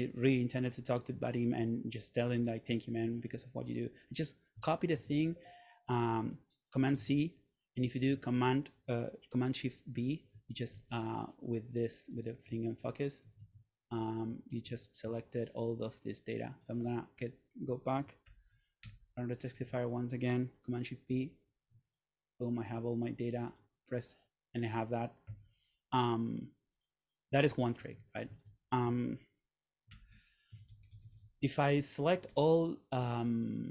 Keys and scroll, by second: 2.8 shift+super+v, 5.1 super+Tab, 6.3 super+c, 7.1 super+Tab, 10.1 shift+super+v, 10.9 super+z, 13.0 shift+super+v, 13.5 super+z, 14.7 shift+super+v, 18.3 super+/, 18.9 Return, 21.2 shift+super+v, 25.4 Escape, 28.0 super+a, 30.0 super+/, 30.3-31.6 typing, 32.2 Down.